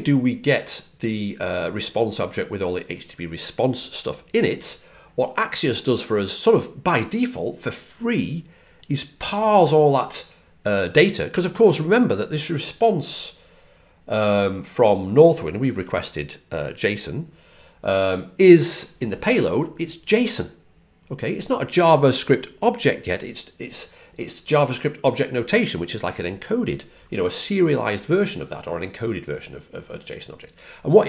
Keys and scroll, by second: 18.5-19.2 typing.